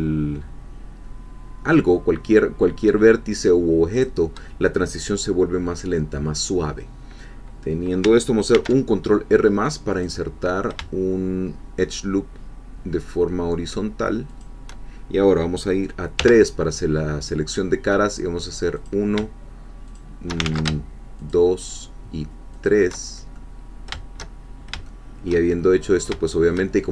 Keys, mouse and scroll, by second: 3.9 shift+click, 8.5 ctrl+r, 9.9 click, 14.3 shift+click, 16.2 3, 16.9 scroll up 2, 18.9 click, 20.0 shift+click, 20.5 ctrl+shift+z, 21.2 shift+click, 22.7 shift+click, 23.1 shift+scroll down 2, 23.3 shift+middle click, 24.3-24.7 shift+scroll down 1, 24.9 shift+middle click, 25.6 shift+scroll up 1, 26.3 shift+middle click.